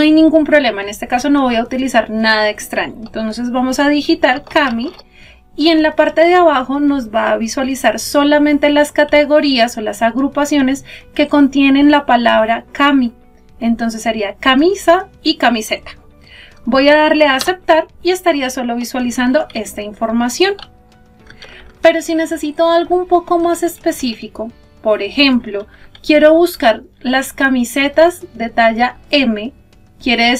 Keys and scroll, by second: 17.3 Return.